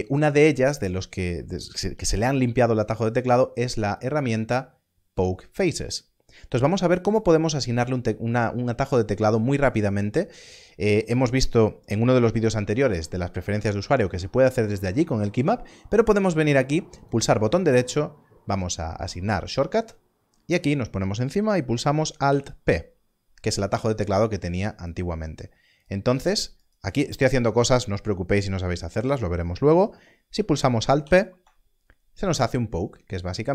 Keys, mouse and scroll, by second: 3.9 click, 16.9 click, 19.5 right click, 22.3 alt+p, 25.7 alt+p, 30.3 click, 31.0 alt+p.